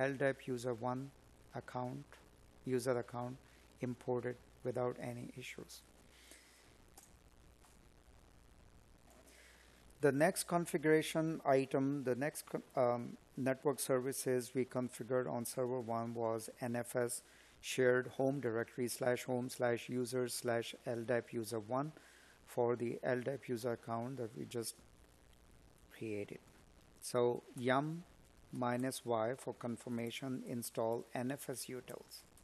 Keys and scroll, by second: 17.6 space, 18.7 space, 20.5 space, 22.6 space, 32.0 space.